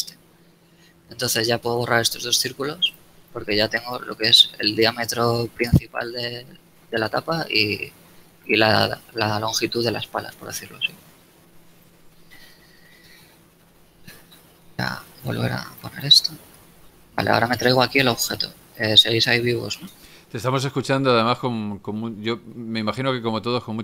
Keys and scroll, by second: 0.3 a, 4.6 Tab, 5.6 KP_7, 8.6 Tab, 11.0 z, 13.7 n, 16.3 g, 20.0 n, 21.6 shift+z, 23.6 a.